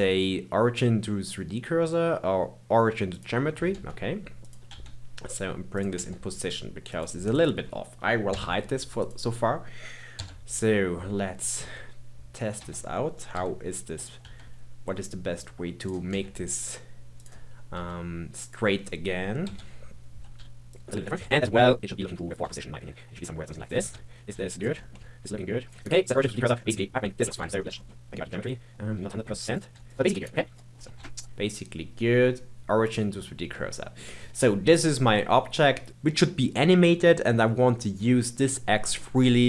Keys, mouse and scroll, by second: 3.7 g, 4.7 r, 6.0 g, 7.3 click, 8.2 h, 9.0 click, 10.1 KP_7, 11.6 r, 13.3 KP_3, 14.2 r, 16.1 g, 17.7 r, 19.5-22.4 typing, 23.9 KP_3, 24.3 r, 24.7 scroll up 2, 24.8 shift+middle click, 24.9 g, 25.8 right click, 26.6-27.3 middle drag, 27.3 KP_1, 27.5 scroll up 3, 27.7-28.0 shift+middle drag, 28.0 g, 28.7 scroll down 2, 28.9 r, 29.7 g, 30.0 scroll up 2, 30.2 right click, 30.9 ctrl+z, 31.1-33.5 right drag, 33.5-34.0 middle drag, 34.0-35.1 scroll down 4, 35.1-35.9 middle drag.